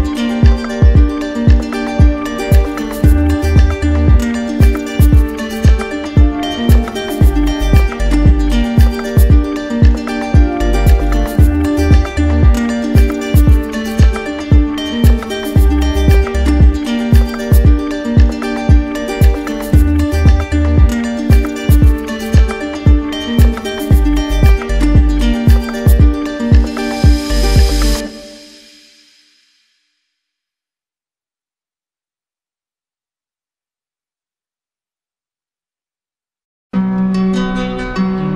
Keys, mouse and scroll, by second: 0.1 ctrl+z, 4.8 click, 5.0 ctrl+z, 6.9-8.0 drag, 8.6-9.6 drag, 10.7 click, 14.1 click, 14.3 ctrl+z, 16.0 click, 19.0 click, 19.1 ctrl+z, 22.2 click, 22.3 ctrl+z, 24.0 click, 25.5 click, 32.6 click, 32.9 ctrl+z.